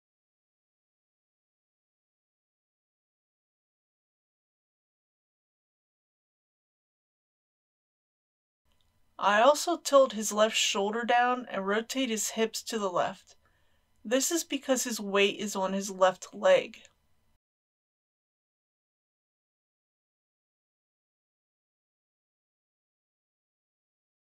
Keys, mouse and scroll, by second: 0.1 click, 0.5-1.1 scroll up 1, 1.1-3.8 typing, 1.6 click, 2.5 click, 2.9 click, 5.2 click, 5.8 r, 5.9 y, 6.5 r, 7.7 r, 8.0 click, 8.6-9.0 scroll up 1, 10.9 click, 14.8 r, 19.2 click, 20.8 middle click, 21.8 click, 22.2 middle click, 22.9 r, 23.3 x.